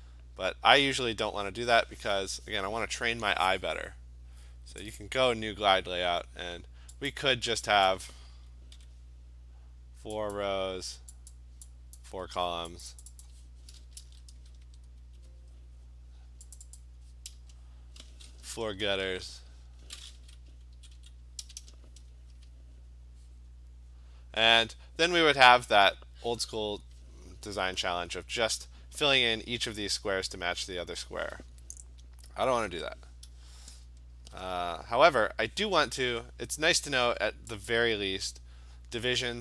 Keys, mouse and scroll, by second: 5.0 click, 7.2 click, 7.9 click, 8.8 4, 10.4 click, 11.4 click, 12.0 click, 12.1 4, 12.9 click, 13.1 click, 13.3 click, 14.1 ctrl+a, 14.4 0, 14.7 Tab, 15.0 0, 16.6 click, 16.8 click, 17.4 1, 18.7-19.4 typing, 20.8 Right, 21.0 Right, 21.5-22.9 typing, 32.6 Escape, 37.8 click.